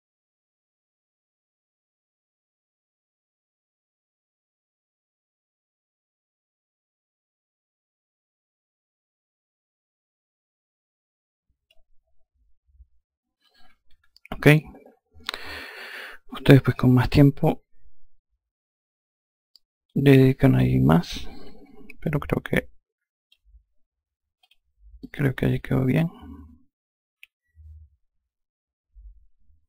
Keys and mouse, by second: 1.7 click, 2.6 click, 3.6 ctrl+click, 4.1 click, 5.1 ctrl+click, 5.6 click, 7.1 ctrl+click, 7.7 click, 10.0 ctrl+click, 10.7 click, 13.4 F1, 16.5 alt+click, 23.9 click, 24.5 alt+click.